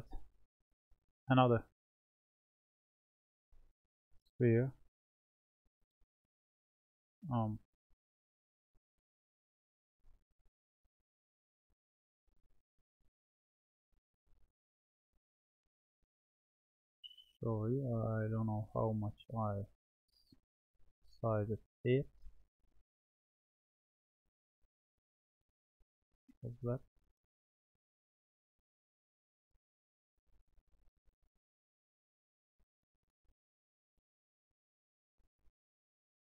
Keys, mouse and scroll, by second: 0.6-3.6 drag, 4.0-7.1 middle drag, 7.5-8.7 drag, 8.7-10.7 middle drag, 10.7 click, 14.2 click, 16.2-18.2 drag, 18.1-19.2 shift+middle drag, 20.9 s, 26.5 ctrl+z, 27.4 click, 30.7 s.